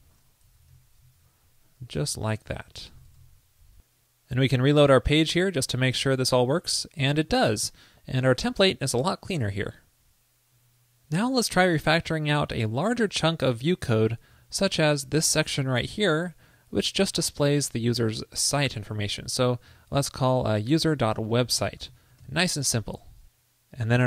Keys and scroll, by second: 1.4 super+Left, 1.4 alt+Right, 3.3 super+s, 19.0 super+x, 19.9 ctrl+shift+>, 22.4 super+s.